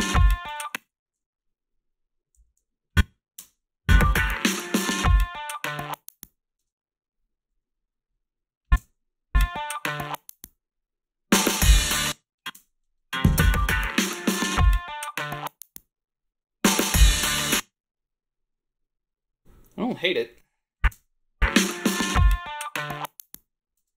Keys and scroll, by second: 0.4 space, 0.8 ctrl+b, 2.4 a, 3.3 space, 6.6 space, 8.8 space, 11.8 space, 12.5 space, 17.3 space, 20.9 space, 23.8 space.